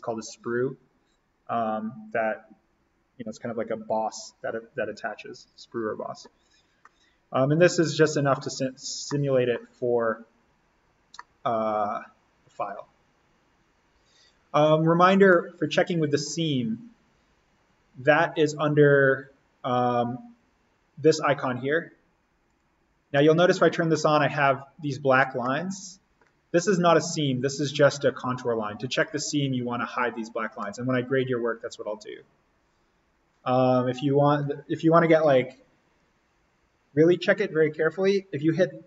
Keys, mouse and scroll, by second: 5.3 click, 6.7 scroll up 1, 6.9 scroll down 1, 9.0-11.0 middle drag, 11.0 scroll up 1, 11.2 middle click, 15.2-19.3 middle drag, 19.3 click, 22.4 click, 23.1-26.1 middle drag, 26.1 scroll down 1, 28.8 click, 30.5-36.8 middle drag.